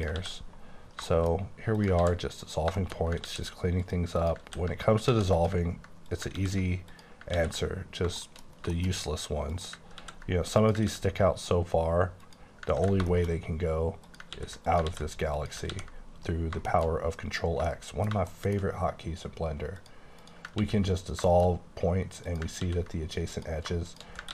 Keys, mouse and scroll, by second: 0.2 ctrl+x, 1.0 shift+middle click, 1.5 scroll up 1, 1.7 click, 2.1 ctrl+x, 2.5 click, 2.8 shift+middle click, 3.0 shift+scroll up 2, 3.3 ctrl+x, 3.8 click, 4.2 click, 4.5 x, 5.1 z, 5.4 click, 6.4 x, 6.9 click, 7.3 x, 7.5-8.7 scroll down 11, 8.2 shift+middle click, 8.7 middle click, 9.0 scroll up 5, 9.5 click, 9.9 ctrl+x, 10.6 click, 10.9 ctrl+x, 12.3 click, 12.8 x, 13.1 shift+middle click, 13.4 shift+scroll up 2, 14.0 click, 14.4 x, 14.7 click, 14.9 ctrl+x, 15.3 click, 15.8 ctrl+x, 16.0-16.8 scroll down 9, 16.8 middle click, 17.0-17.6 scroll up 5, 17.8 shift+middle click, 18.4 shift+middle click, 18.6-19.8 shift+scroll up 3, 19.8 click, 20.2 click, 20.6 ctrl+x, 21.0 scroll down 3, 21.3 shift+middle click, 21.6 shift+scroll up 2, 22.2 click, 22.7 ctrl+x, 23.3 click.